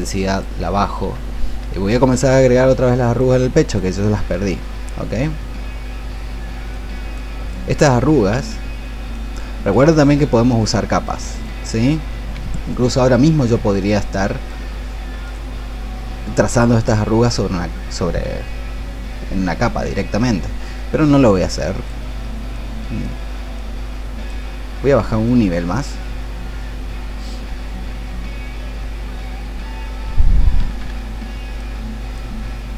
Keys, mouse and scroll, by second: 25.2-32.7 drag.